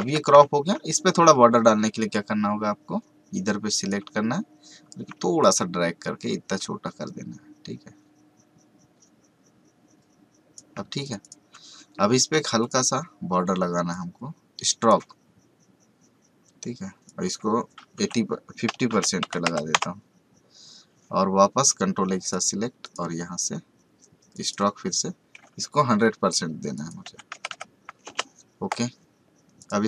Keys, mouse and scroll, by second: 0.0 v, 0.4 scroll down 2, 1.9 click, 12.6-17.0 drag, 21.6 click, 26.7 click, 28.0 Return, 29.5 click.